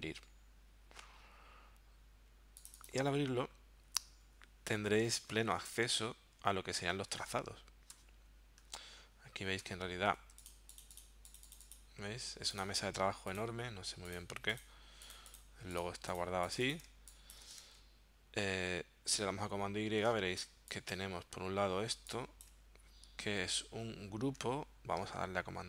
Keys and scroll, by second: 5.5 super+y, 7.1 super+y, 7.9 v, 8.6 w, 9.6 v, 10.1 z, 16.9 space, 17.9 super+y, 19.1 super+y, 20.4 v, 23.3 super+z.